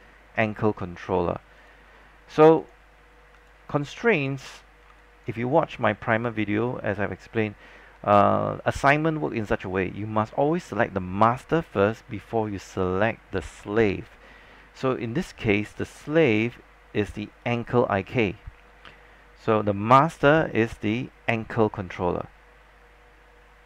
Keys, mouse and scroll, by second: 5.0 alt+click, 6.7 alt+click, 14.9 alt+middle click, 15.3 scroll up 1, 16.1 alt+middle click, 17.5-18.7 drag, 19.0-20.5 scroll down 1, 20.5-21.7 drag.